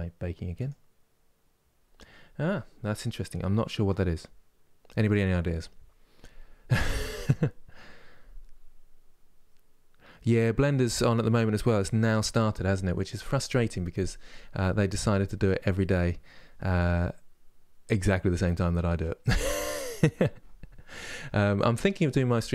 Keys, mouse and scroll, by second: 0.8-22.5 drag.